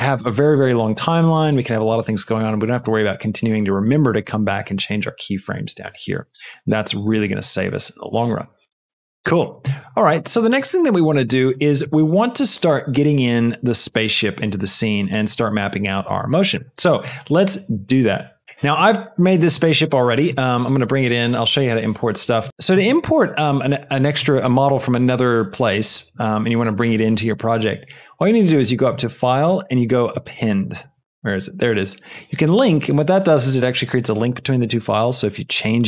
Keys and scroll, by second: 8.9 space.